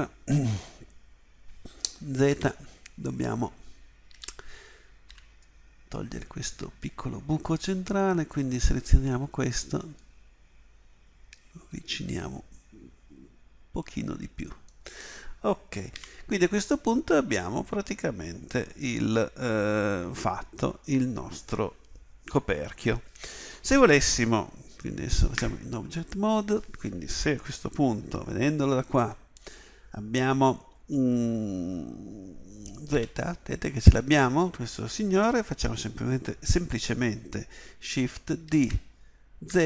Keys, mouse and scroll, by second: 2.3 z, 4.1 a, 5.1 b, 10.5-13.3 drag, 16.0 z, 25.4 Tab, 28.9 KP_1, 32.9 z, 38.4 shift+d.